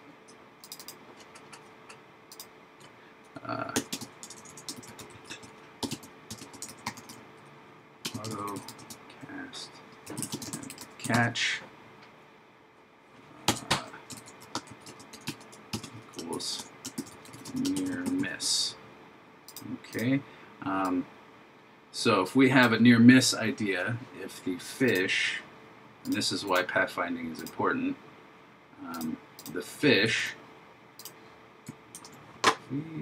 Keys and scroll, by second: 4.8 shift+a, 6.8 shift+a, 10.6 shift+c, 14.2 shift+a, 16.4 shift+m, 17.0 shift+n, 17.8 shift+m, 30.1 super+c, 32.0 super+v.